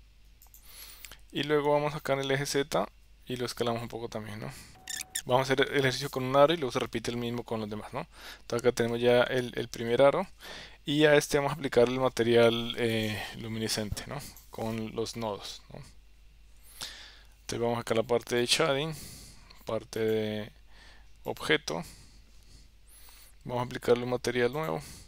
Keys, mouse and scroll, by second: 1.7 KP_1, 3.7-4.8 middle drag, 4.8 Tab, 4.9 s, 6.9 KP_7, 10.6 ctrl+s, 12.9 click, 14.3 click.